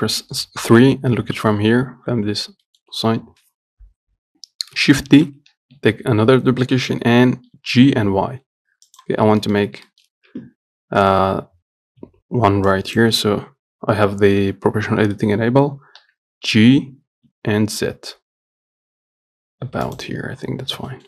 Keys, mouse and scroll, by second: 2.9-5.4 shift+middle drag, 5.4 shift+d, 9.4 scroll up 2, 10.0 scroll up 1, 10.1-12.3 shift+middle drag, 12.3 Tab, 13.0 click, 16.3 g, 20.5 Tab, 20.8 scroll down 2.